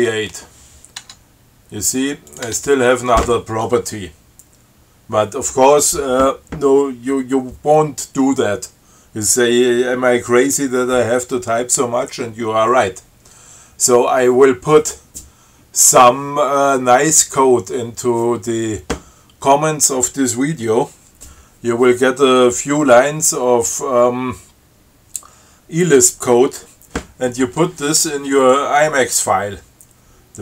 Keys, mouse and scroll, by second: 0.0-0.1 typing, 0.2 Return, 1.2 Tab, 2.5 click, 2.7 Tab.